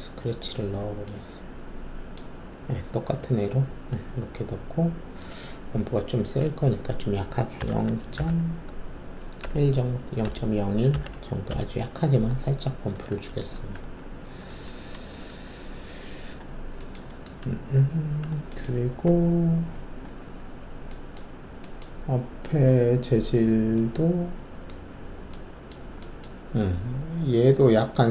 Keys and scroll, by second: 7.5 0, 8.1 ., 9.4-11.1 typing, 11.5 Return.